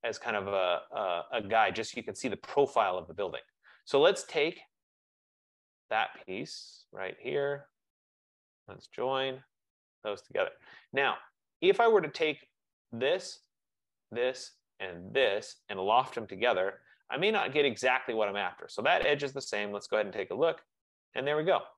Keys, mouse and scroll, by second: 3.5 click, 5.6 click, 7.1 shift+click, 7.9 click, 9.2 n, 9.8 Return, 10.9 click, 13.0 click, 14.2 typing, 15.5 click, 16.7 t, 16.9 Return.